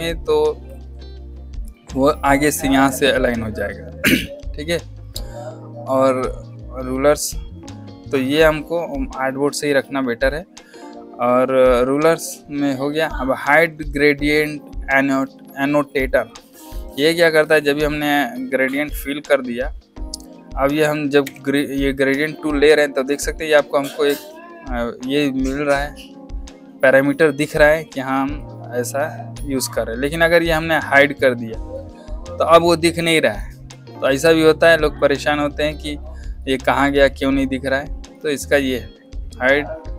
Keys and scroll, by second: 21.1 g.